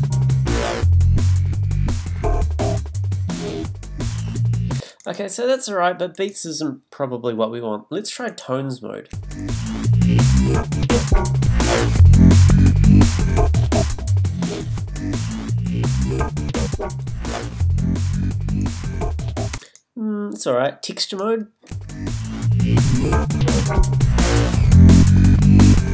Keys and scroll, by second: 4.8 space, 21.7 space.